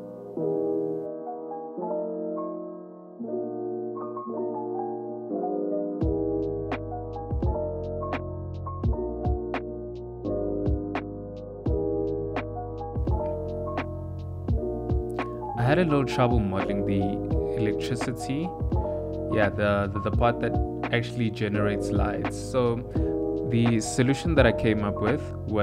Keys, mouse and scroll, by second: 0.0 e, 1.4 ctrl+r, 1.7 s, 2.0 click, 2.8-5.8 typing, 6.0 middle click, 6.4 ctrl+middle click, 7.3-9.7 typing, 10.2 Tab, 10.6 click, 10.9 click, 11.3 g, 12.8 click, 13.2 shift+middle click, 13.5-19.1 typing, 14.5 shift+middle click, 14.7 ctrl+middle click, 20.1 ctrl+middle click, 20.4 shift+middle click, 20.7 Tab, 21.7 alt+h, 21.9 click, 22.7 click, 22.9 click, 23.0 ctrl+middle click, 23.3 middle click, 24.0 click, 24.4 click, 24.6 middle click, 24.7 ctrl+middle click, 24.9 shift+middle click, 25.1 middle click, 25.4 ctrl+middle click.